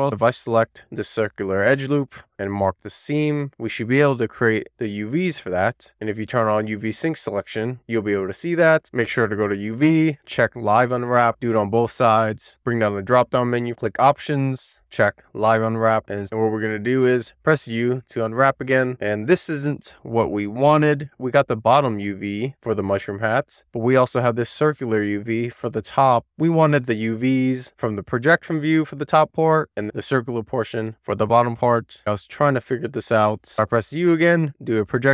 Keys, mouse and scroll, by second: 0.0 middle click, 0.1 3, 0.6 scroll up 1, 0.7 shift+middle click, 1.1 middle click, 1.3 scroll down 2, 1.6 middle click, 1.9 middle click, 2.7-5.8 right drag, 6.3 click, 8.0 shift+middle click, 9.5-11.6 drag, 13.6-15.5 drag, 15.8 a, 20.5 middle click, 22.2 middle click, 23.1 middle click, 24.1 click, 24.6-25.8 middle drag, 26.5 click, 27.0 middle click, 27.9 ctrl+click, 28.3 shift+middle click, 29.1 middle click, 30.1 middle click, 30.7 shift+middle click, 31.0 shift+scroll down 1, 31.2 middle click, 32.2 ctrl+click, 32.7 middle click, 33.4 a, 33.6 u.